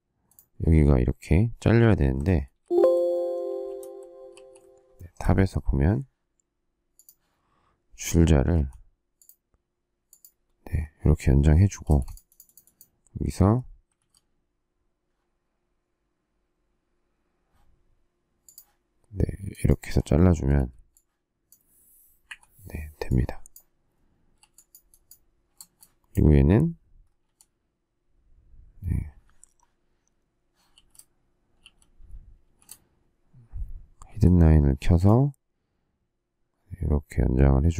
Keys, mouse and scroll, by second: 2.5 alt+shift+a, 3.4 shift+a, 4.2 alt+t, 4.9 shift+middle click, 8.4 t, 11.8 space, 13.9 alt+x, 20.3 space, 22.2 Delete, 24.3 e, 25.5 space, 27.1 m, 30.7 shift+v, 31.5 shift+v, 32.4 shift+c, 34.0 m.